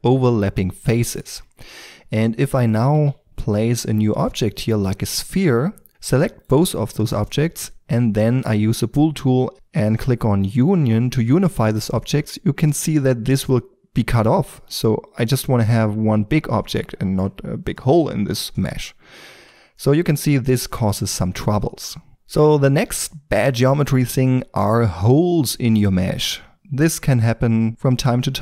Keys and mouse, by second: 1.2 Tab, 2.6 click, 3.0 shift+a, 4.6 s, 5.9-8.9 right drag, 10.6-15.2 drag, 15.2-16.4 middle drag, 19.4 ctrl+z, 22.1 Tab, 22.1 x, 25.1-26.3 middle drag, 26.5-28.4 middle drag.